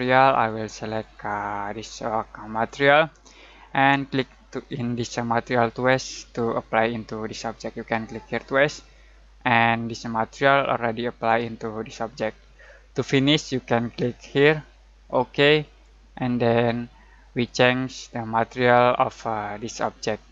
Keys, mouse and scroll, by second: 8.4 click, 15.0-16.0 drag.